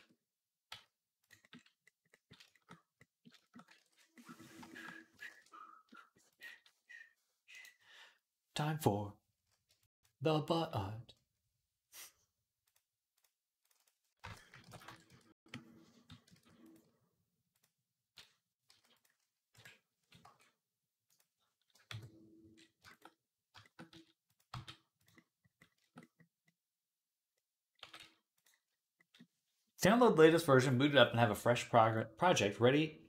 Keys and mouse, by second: 1.7-3.2 middle drag, 3.6 ctrl+s, 5.1 shift+a, 6.4 s, 6.9-9.6 middle drag, 9.6-22.8 shift+drag, 16.2 ctrl+s, 18.5 s, 19.3 KP_1, 20.1 g, 21.7 KP_3, 23.6-33.0 middle drag, 23.7 s, 24.3 g, 27.8 g.